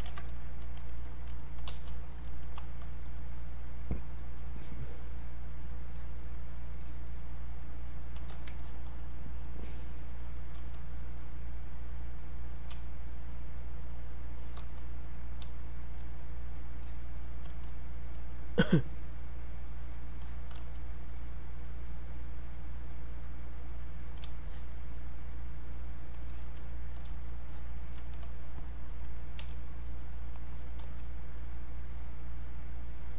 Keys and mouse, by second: 0.2 ctrl+z, 0.4 click, 1.3-3.0 typing, 5.1 click, 11.4 click, 12.8 space, 13.1 click, 13.2 space, 13.5 click, 15.2 click, 15.5 space, 15.8 click, 16.0 space, 16.2 click, 17.6 shift+click, 24.5 alt+click, 26.3-29.1 alt+drag, 29.4 x, 30.0 click, 30.8 x, 31.3 click.